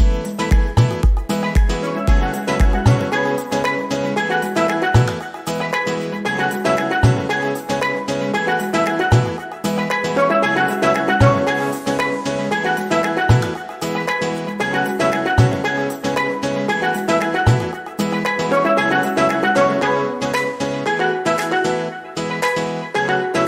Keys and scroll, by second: 7.4 r, 8.5 e, 17.5 Up, 21.0 Down.